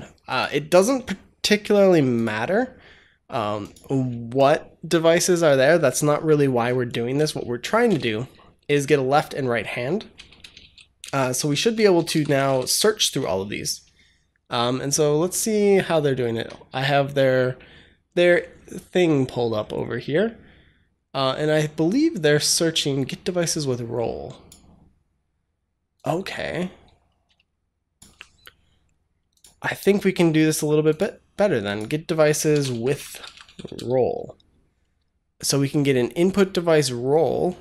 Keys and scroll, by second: 7.7 Return, 10.0 Return, 10.5-12.9 typing, 32.1-34.1 typing.